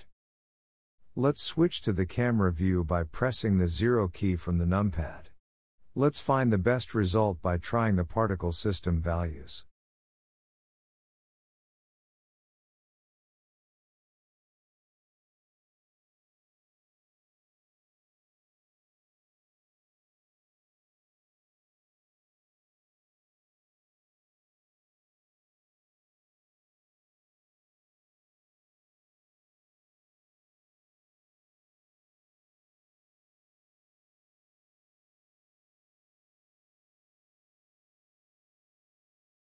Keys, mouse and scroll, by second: 0.6 shift+middle click, 1.0-1.4 scroll down 1, 1.4-4.0 shift+middle drag, 4.0 scroll up 1, 4.6 click, 5.7-7.3 drag, 7.3 KP_0, 8.8-9.9 drag, 9.9 KP_0, 11.4 click, 13.8 click, 15.6-18.5 scroll down 12, 18.5-21.1 drag, 21.1-22.1 scroll up 12, 22.4-23.5 drag, 23.5 KP_0, 26.6 click, 27.7 click, 28.9 shift+middle click, 29.5 click, 29.9 s, 30.8 g, 32.4-33.6 shift+middle drag, 33.6 scroll down 1, 34.0 shift+middle click, 34.6 click, 35.5 s, 37.8 s.